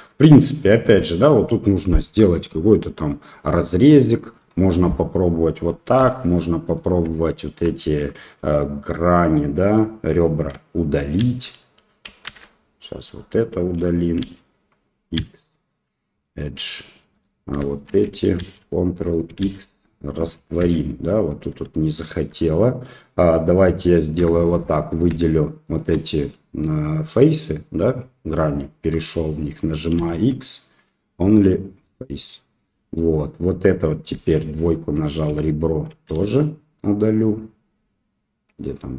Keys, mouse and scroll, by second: 0.6 ctrl+r, 5.9 2, 6.6 click, 7.3 shift+click, 11.2 ctrl+x, 12.2 ctrl+z, 12.8 click, 14.2 ctrl+x, 15.1 x, 17.1 click, 18.3 ctrl+x, 19.0 click, 19.4 ctrl+x, 20.6 ctrl+z, 24.1 3, 24.5 right click, 25.6 shift+right click, 29.9 x, 33.1 click, 34.5 click, 34.5 2, 36.1 x.